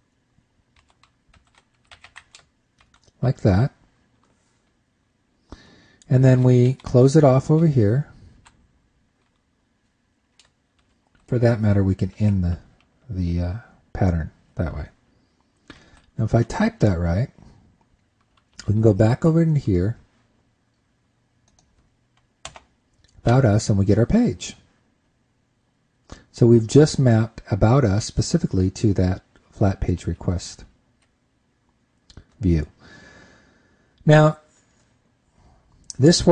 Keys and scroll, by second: 16.4 super+s, 19.0 super+Tab, 30.4 super+Tab.